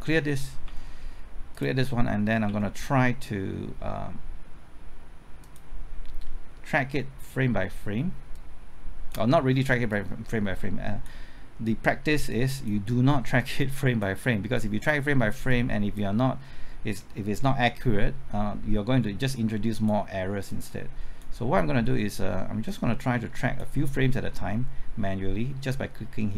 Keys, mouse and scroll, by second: 0.6 typing, 1.5 click, 2.4 typing, 5.4-26.3 drag.